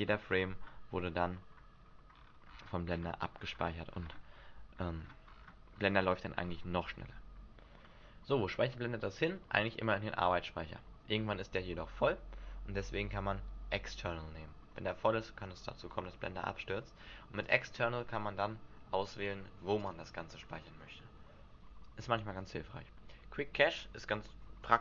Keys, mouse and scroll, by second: 1.1-1.5 scroll down 2, 1.5-2.4 scroll up 8, 2.4 scroll down 2, 2.7-3.3 scroll down 9, 3.8-4.2 scroll down 12, 4.7-6.4 scroll down 18, 6.4-8.0 scroll down 9, 9.7 click, 17.4 click, 19.8 click.